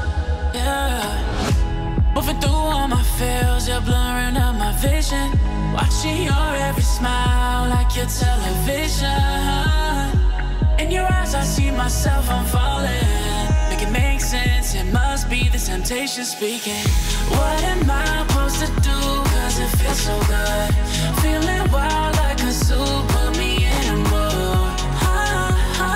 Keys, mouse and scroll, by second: 1.3 F7, 1.8-2.4 alt+scroll up 1, 2.4-3.8 drag, 10.5-10.9 alt+scroll down 1, 11.6 click, 11.7-13.2 drag, 17.0 right click, 18.6 click, 19.3 Delete, 20.8 drag.